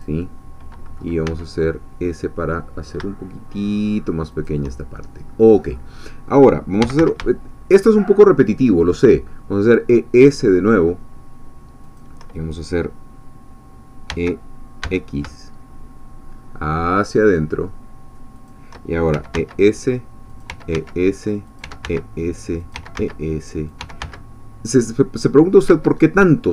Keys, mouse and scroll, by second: 0.0 click, 1.3 s, 4.3 shift+click, 6.6-7.5 typing, 11.9 shift+click, 14.1 e, 14.8 x, 18.4 shift+click, 18.9-24.5 typing, 20.3 click, 21.5 click, 22.6 click, 23.7 click, 25.7 Escape.